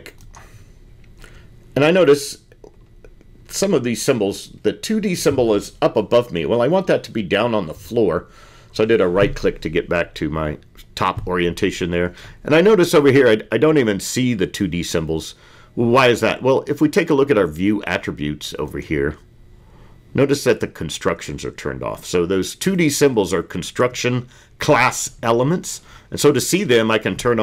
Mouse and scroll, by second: 2.3 click, 5.1-7.9 drag.